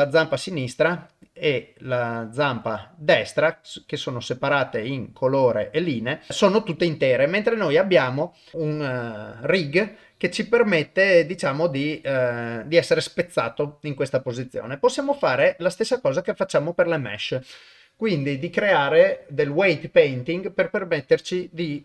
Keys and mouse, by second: 2.2 click, 2.6 click, 3.5 click, 3.9 click, 4.5 click, 8.3 click, 15.1 click.